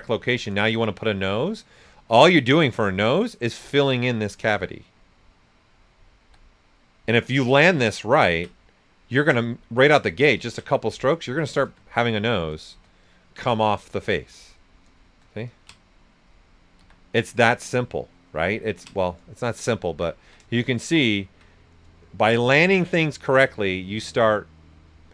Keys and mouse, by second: 0.0-0.2 typing, 0.3 click, 1.1 alt+shift+right click, 3.5-6.2 drag, 6.2 s, 6.2-10.3 drag, 11.1-13.0 right drag, 13.0-14.6 drag, 14.6 right click, 14.8 r, 15.5 ctrl+click, 16.3 right click, 16.7 s, 16.8-18.7 drag, 19.1 right click, 20.6 shift+click, 21.2 ctrl+right click, 22.2 shift+click, 23.0 right click, 24.9 right click.